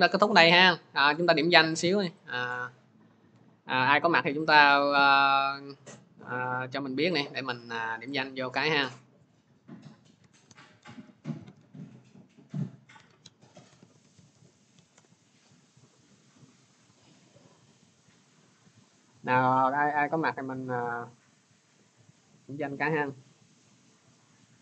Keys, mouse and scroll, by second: 2.1 click, 2.7-4.5 drag, 5.0 scroll, 6.3 click, 7.0 middle click, 7.0 click, 8.0 click, 9.2 click, 9.5-15.4 typing, 19.1 right click.